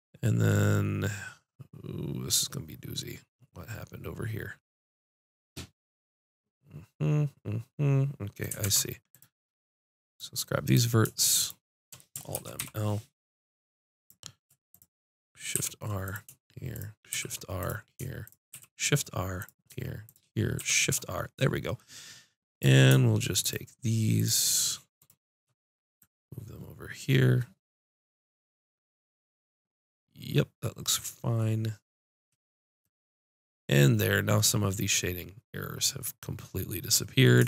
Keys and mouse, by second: 8.6 ctrl+Tab, 10.6-12.1 drag, 12.5 alt+m, 15.7 shift+r, 17.1 shift+r, 18.5 shift+r, 20.5 shift+r.